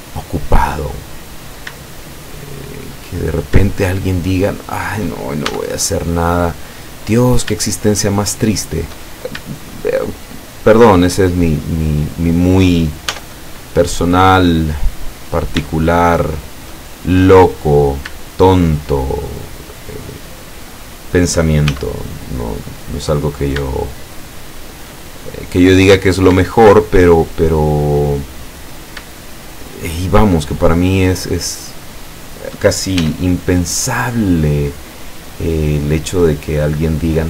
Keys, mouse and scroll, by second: 0.1 click, 1.5 shift+right click, 2.3 shift+right click, 3.3 shift+right click, 3.8 shift+right click, 4.3 shift+right click, 4.7 shift+right click, 5.5 shift+e, 7.0 click, 9.1 shift+right click, 10.1 shift+right click, 10.8 shift+right click, 11.1 shift+right click, 11.5 shift+right click, 12.3 shift+right click, 13.1 e, 15.3 click, 15.8-16.9 shift+drag, 17.6 right click, 18.5 shift+right click, 19.0 shift+right click, 19.9 shift+right click, 20.3 shift+right click, 20.8 shift+right click, 21.7 shift+e, 23.2 click, 23.8-25.9 shift+middle drag, 25.9 scroll down 1, 26.4-28.0 shift+middle drag, 28.7 right click, 29.2 shift+right click, 29.7 shift+right click, 30.1 shift+right click, 30.7 shift+right click, 31.2 shift+right click, 31.9 shift+right click, 32.3 shift+right click, 33.0 shift+e, 35.1 click.